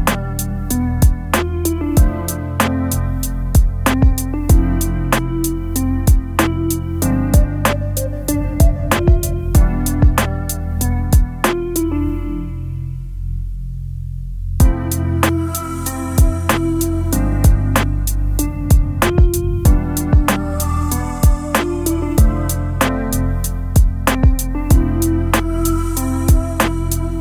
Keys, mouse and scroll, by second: 8.9 double click, 10.5 ctrl+a, 13.0 double click, 19.0 e, 20.0 a, 21.4-22.4 typing, 23.5 ctrl+a, 24.3 ctrl+c, 25.9 double click.